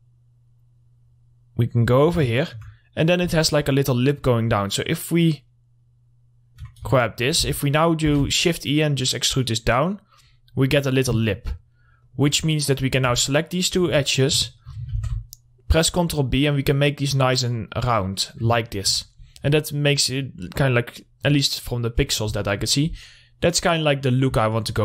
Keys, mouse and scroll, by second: 2.8 alt+middle click, 3.5-7.4 drag, 7.4 alt+middle click, 7.8-8.5 typing, 8.8 right click, 9.8 click, 11.0 scroll up 1, 12.3 click, 13.0 middle click, 13.2 scroll up 1, 13.7 alt+shift+click, 14.6 middle click, 15.3 ctrl+b, 18.6 click, 19.0 alt+middle click, 19.7 click, 20.8 scroll up 1, 21.7 scroll down 1, 22.2 click, 24.5 click.